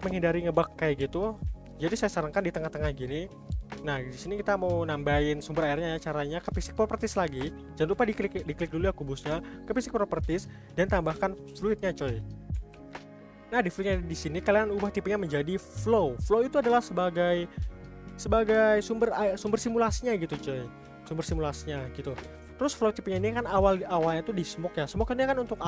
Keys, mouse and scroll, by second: 0.1-0.8 scroll down 1, 0.8-3.8 middle drag, 7.1 click, 7.2 click, 7.4 click, 8.0 click, 8.2 click, 8.4 click, 8.6 click, 8.7 click, 8.9 click, 9.8 click, 9.9 click, 10.1 click, 10.2 click, 11.6-12.8 drag, 12.8 ctrl+s, 14.6-17.7 drag, 25.4-25.6 drag.